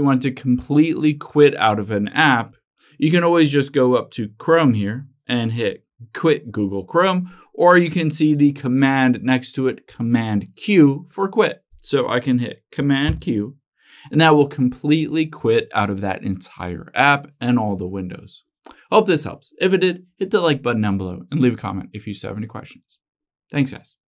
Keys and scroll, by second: 13.2 super+q.